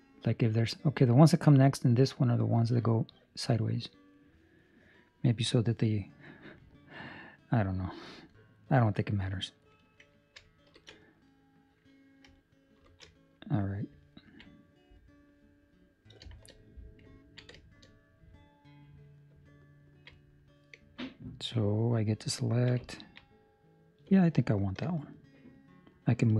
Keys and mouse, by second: 13.8 ctrl+alt+shift+5, 14.1 ctrl+middle click, 14.4 middle click, 16.2 shift+middle click, 16.6 middle click, 17.1 ctrl+middle click, 17.5 shift+middle click, 19.5 ctrl+middle click, 20.1 middle click, 22.4 ctrl+middle click, 22.8 ctrl+middle click, 24.3 alt+right click.